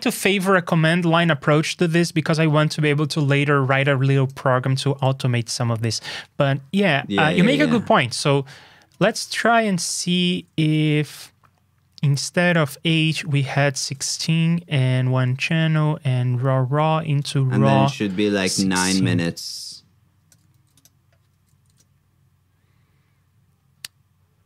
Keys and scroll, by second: 9.9 alt+shift+Down, 10.7 ctrl+a, 20.5 super+c, 21.3 super+v.